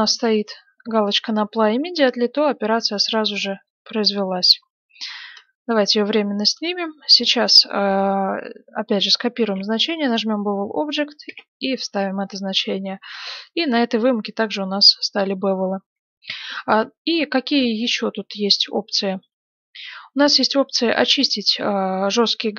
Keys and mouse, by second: 3.3 x, 4.0-8.1 drag, 6.5-8.8 right drag, 8.8 middle click, 9.4 ctrl+c, 10.0-11.8 drag, 11.2 ctrl+v, 11.8 middle click, 12.5 middle click, 12.9 middle click, 14.6-22.5 middle drag.